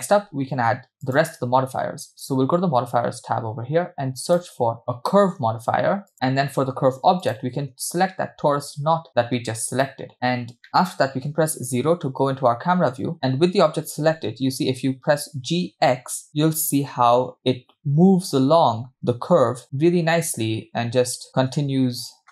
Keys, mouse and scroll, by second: 4.3-6.1 drag, 7.3 click, 11.6 KP_0, 14.7 g.